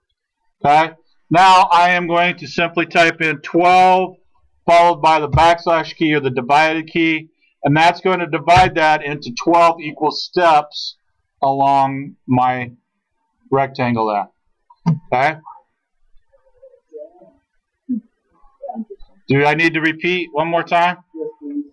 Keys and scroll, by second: 3.3-4.2 typing, 6.9 /, 8.6 Return.